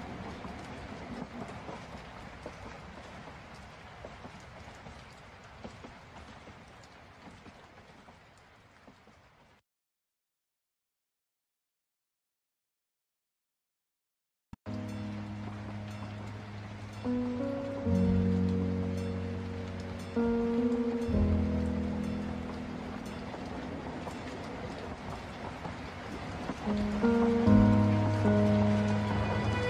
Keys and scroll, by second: 6.6 ctrl+space, 16.7 ctrl+space, 19.5 ctrl+t, 19.9 ctrl+alt+space, 26.2 ctrl+space, 27.6 ctrl+t, 29.1 ctrl+space.